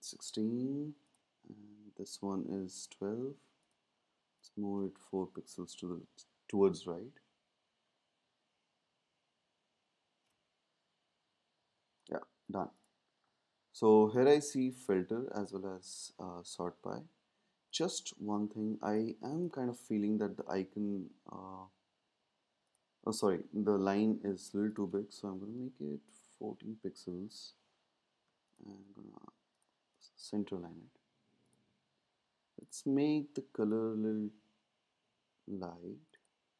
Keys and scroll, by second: 5.3 Right, 5.4 Right, 10.9 Right, 20.2 ⟲, 25.4 Down, 25.5 Down.